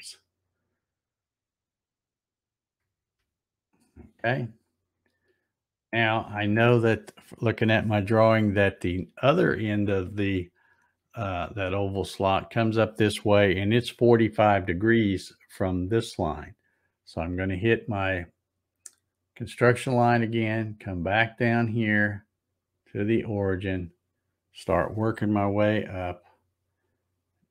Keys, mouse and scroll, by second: 4.9-7.0 scroll up 14, 19.3 click, 20.8-22.0 scroll up 9, 23.4-27.5 drag, 25.6 z.